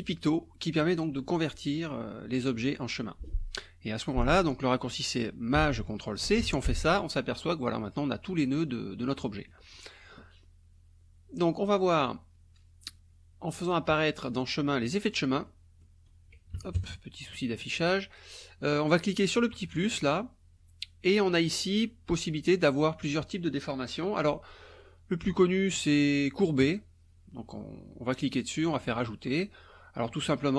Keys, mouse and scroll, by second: 6.3 ctrl+shift+c, 8.0 click, 9.1 click, 13.5 click, 14.9 click, 15.5 click, 16.6 KP_Subtract, 16.8 KP_Add, 17.4 click, 18.7 click, 19.8 click, 21.8 scroll up 1, 22.6 scroll up 2, 26.6 click, 28.7 click.